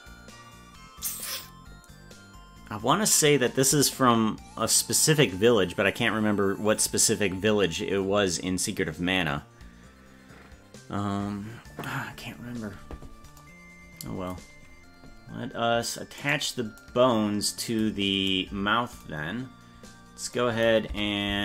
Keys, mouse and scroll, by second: 16.3 right click, 20.9 Tab.